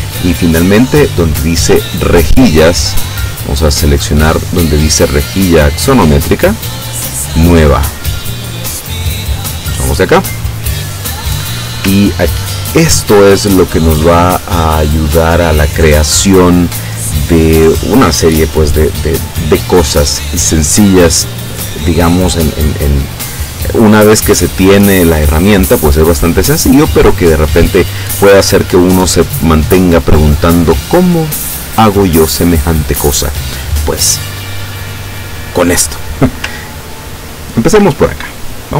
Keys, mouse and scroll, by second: 0.7 click, 3.5 click, 6.1 click, 7.2 click, 9.4 click, 12.1-12.8 ctrl+scroll up 4, 13.5 ctrl+scroll down 2, 14.7 scroll down 2, 15.2-15.6 scroll up 2, 37.3 ctrl+scroll down 2.